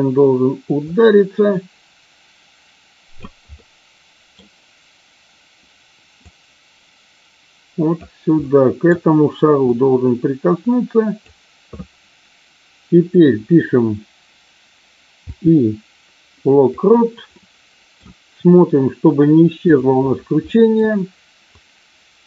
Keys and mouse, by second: 0.8-3.2 drag, 3.5-4.3 middle drag, 6.2-8.0 drag, 8.3-8.9 middle drag, 9.5-11.3 drag, 17.3-17.9 middle drag, 19.7 click, 20.5 middle click, 21.5-22.2 drag.